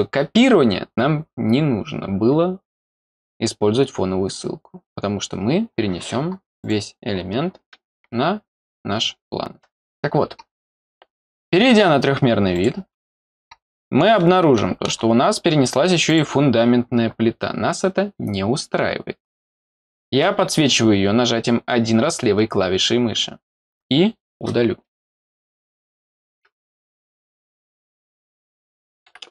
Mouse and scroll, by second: 6.6 click, 12.5 click, 13.7 middle click, 14.1 middle click, 15.1 scroll up 1, 16.1 click.